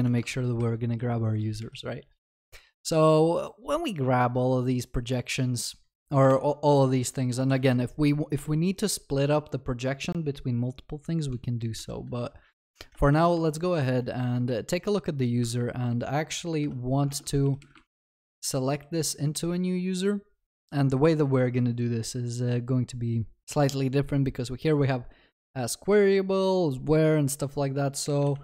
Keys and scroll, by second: 0.0 ctrl+d, 1.6 ctrl+b, 8.4 Return, 12.9 Return, 17.0 Return, 17.1 ctrl+BackSpace.